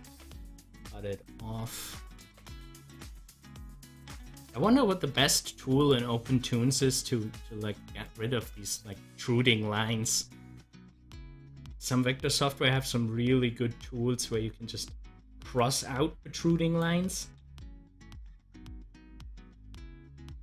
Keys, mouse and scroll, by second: 2.6 scroll up 1, 5.8 click, 6.3 scroll up 1, 9.9 Delete, 11.2-18.2 drag, 18.5 Delete, 20.3 click.